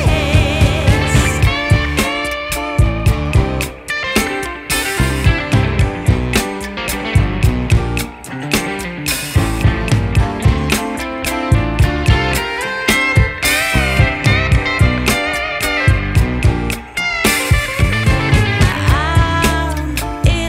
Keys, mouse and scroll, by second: 0.5 scroll up 1, 7.0 click, 9.4 click, 9.9 click, 18.6-20.4 drag.